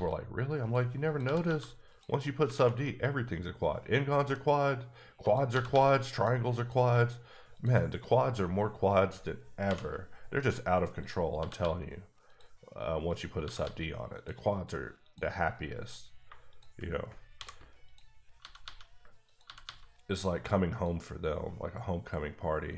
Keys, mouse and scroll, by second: 0.6 click, 1.0 click, 1.2 g, 1.4 g, 1.9 click, 2.5 alt+a, 2.8 middle click, 4.6-5.2 scroll up 1, 5.2 click, 5.5 g, 5.7 g, 6.1 click, 6.6 click, 7.5 shift+click, 7.8 click, 9.6 j, 11.0 click, 11.3 g, 11.6 g, 12.3 click, 13.1 click, 13.4 g, 13.6 g, 14.2 click, 15.0 click, 16.2 shift+click, 17.4-19.6 typing, 17.8 click, 19.3 click, 20.7 click.